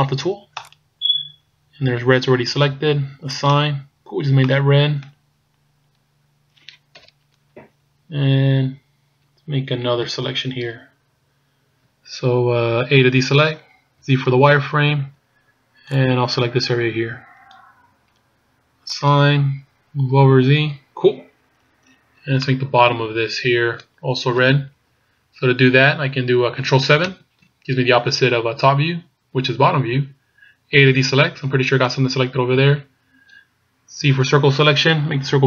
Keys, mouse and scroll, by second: 0.8 right click, 3.4 click, 4.2 scroll down 2, 4.5 middle click, 5.3-5.9 scroll up 2, 6.2-6.5 scroll down 1, 7.0 KP_1, 7.8-8.5 scroll down 4, 10.2 shift+scroll up 1, 10.8 scroll up 3, 13.2 a, 14.0 z, 15.1 b, 19.0 click, 20.3 z, 20.9-21.6 scroll down 3, 22.5 middle click, 27.1 ctrl+KP_7, 31.0 a, 32.0-32.6 scroll up 3, 34.2 c.